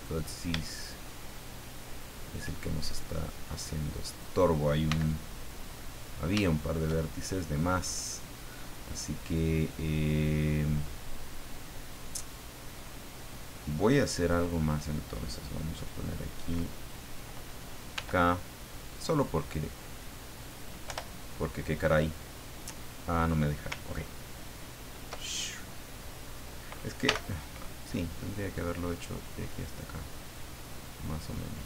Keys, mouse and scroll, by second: 0.7 shift+middle click, 1.6 shift+middle click, 4.0 right click, 4.9 x, 5.4 click, 5.9-6.3 scroll down 2, 6.4 shift+middle click, 7.1 shift+middle click, 7.8-8.3 scroll up 2, 12.3 middle click, 14.2 click, 17.9 k, 19.4 click, 20.4 click, 27.0 k, 28.9-30.5 drag.